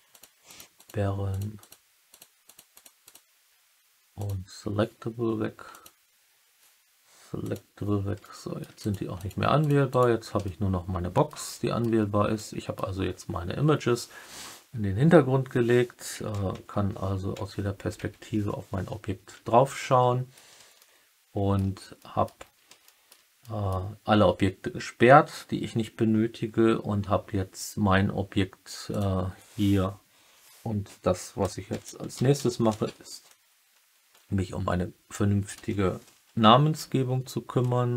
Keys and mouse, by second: 0.0 click, 0.4 click, 0.7 click, 1.2 click, 1.5 click, 2.0 click, 2.4 click, 2.7 click, 3.0 click, 4.1 click, 5.6 click, 7.3 click, 8.1-8.5 alt+middle drag, 9.1 click, 9.8 click, 10.4-11.2 alt+middle drag, 11.4 middle drag, 12.3-12.7 middle drag, 12.7 click, 16.5 KP_3, 17.3 KP_1, 17.9 KP_7, 20.7 alt+middle click, 21.9 middle drag, 22.8 alt+middle drag, 23.3 middle drag, 28.8-37.9 drag.